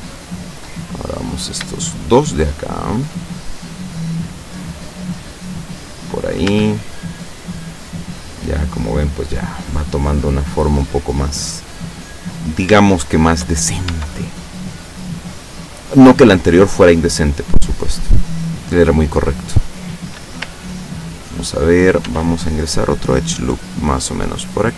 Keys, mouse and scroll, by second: 0.1 shift+middle click, 1.4 right click, 2.0 shift+right click, 3.2 middle click, 4.7-6.2 drag, 6.5 Tab, 6.9-9.9 middle drag, 9.9 scroll up 1, 10.0-10.5 scroll down 3, 11.0-11.8 middle drag, 12.0-12.7 scroll up 4, 13.0-13.7 shift+middle drag, 13.9 shift+Tab, 22.1 ctrl+r, 24.1 click.